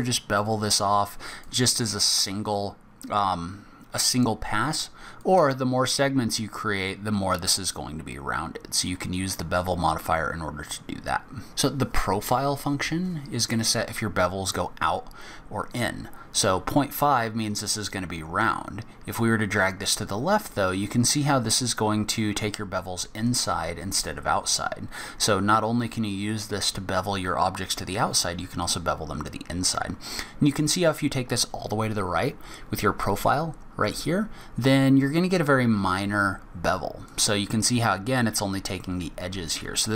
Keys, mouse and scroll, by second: 5.2 click, 18.4 click.